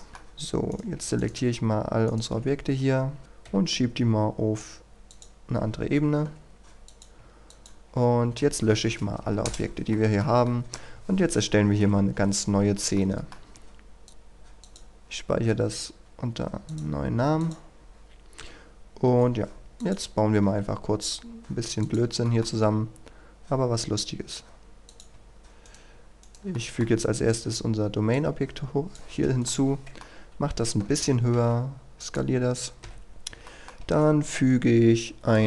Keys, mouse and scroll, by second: 0.1 middle click, 0.7 right click, 1.2 shift+right click, 2.1 shift+right click, 2.4 scroll down 1, 2.7-3.4 scroll up 1, 3.5 m, 5.1 click, 7.5 shift+click, 8.5-9.2 scroll down 1, 9.2 Delete, 9.5 Return, 9.9 middle click, 10.5 shift+middle click, 11.7 KP_1, 12.2-12.8 scroll up 1, 12.9 shift+middle click, 14.1 click, 18.1 scroll down 1, 19.8 click, 22.2 shift+middle click, 24.9 click, 25.1 Tab, 25.7 right click, 26.5 middle click, 27.0 right click, 27.5-28.1 scroll down 1, 28.1 click, 29.5 middle click, 30.9 Tab, 32.0-33.1 drag, 33.5 shift+middle click, 35.3 click.